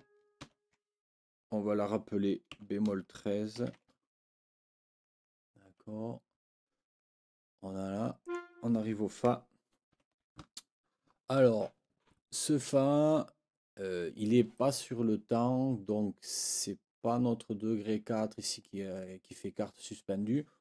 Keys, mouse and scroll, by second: 0.4 ctrl+l, 2.5 b, 5.6 Escape, 8.2 click, 9.9 ctrl+l.